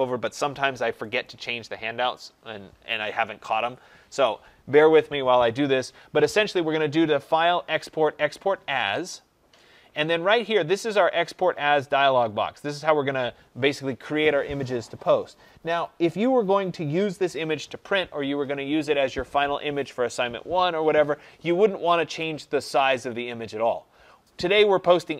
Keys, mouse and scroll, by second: 11.3-16.4 drag.